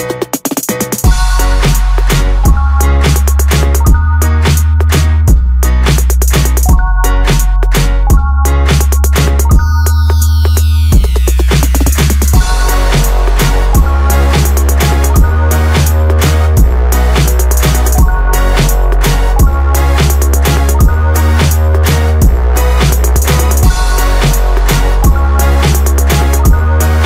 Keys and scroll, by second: 26.5 ctrl+0.